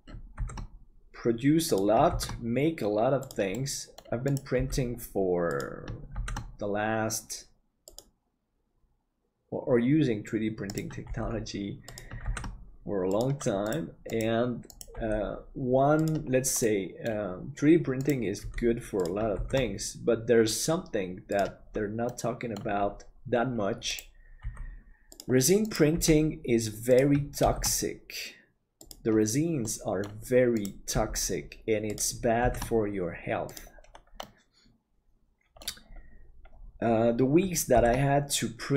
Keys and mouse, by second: 0.4 shift+d, 3.5 middle click, 4.6 g, 6.1 shift+d, 11.0 g, 12.2 shift+d, 14.9 g, 16.6 middle click, 18.4 g, 19.4 shift+d, 22.1 middle click, 24.4 g, 25.9 g, 27.4 shift+d, 29.7 middle click, 30.9 g, 32.4 shift+d, 34.3-35.6 middle drag, 37.7 shift+d.